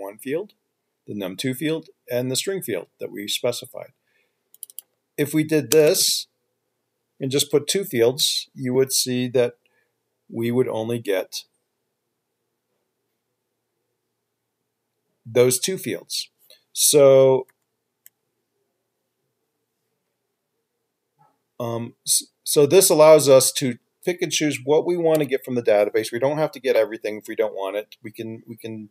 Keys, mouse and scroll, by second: 5.0 double click, 6.0 BackSpace, 6.2 BackSpace, 7.3 BackSpace, 17.9 ctrl+z, 25.7 ctrl+F5.